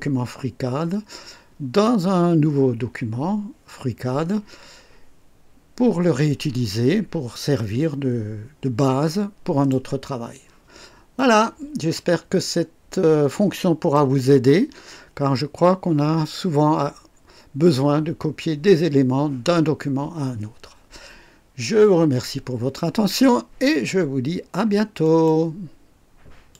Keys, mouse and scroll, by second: 6.6-9.8 drag, 11.1 click, 12.6 scroll up 1, 13.2 right click, 25.0 right click, 26.5 click.